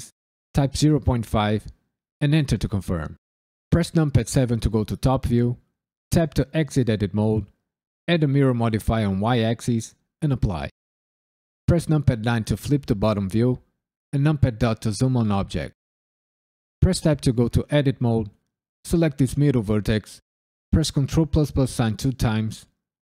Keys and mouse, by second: 0.5 KP_Decimal, 0.8 KP_5, 2.2 KP_Enter, 3.7 KP_7, 6.1 Tab, 7.0-8.0 drag, 8.7 click, 9.2 click, 9.8-10.4 drag, 11.6 KP_9, 14.1 KP_Decimal, 16.7 Tab, 18.7 click, 20.7 ctrl+KP_Add, 21.9 ctrl+KP_Add.